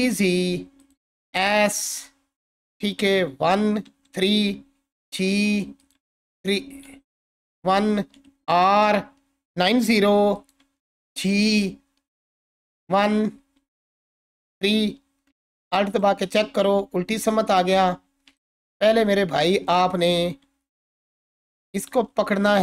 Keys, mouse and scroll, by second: 0.0-1.1 typing, 0.8 click, 1.9 click, 3.3-6.1 typing, 5.8 click, 7.3-8.0 typing, 9.7-11.0 typing, 10.3 click, 12.4 click, 12.8 typing, 14.3 typing, 14.9-15.3 scroll up 1, 15.3-17.5 alt+drag, 17.9-18.3 scroll up 1, 18.4-19.0 alt+shift+drag, 22.4-22.6 alt+drag.